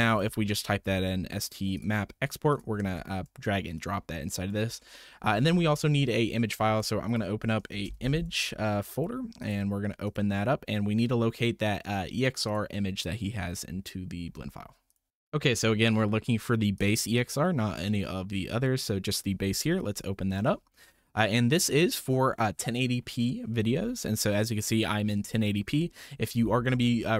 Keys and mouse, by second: 2.9 shift+middle drag, 3.8-4.6 drag, 4.8 shift+click, 6.6 shift+a, 10.0 click, 21.2 click.